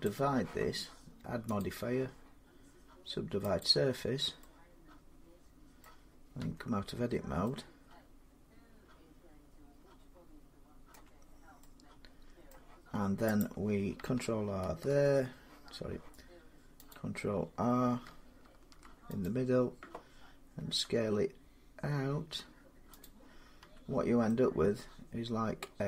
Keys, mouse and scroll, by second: 1.4 click, 3.4 click, 5.6 middle click, 6.2 Tab, 6.7-7.2 scroll up 3, 7.2 scroll, 10.7 Tab, 10.7 middle click, 12.3 middle click, 13.2 click, 14.6 ctrl+e, 16.7 click, 18.2 ctrl+r, 19.0 click, 20.4 s, 22.8 click, 23.4 Tab, 25.7 middle click.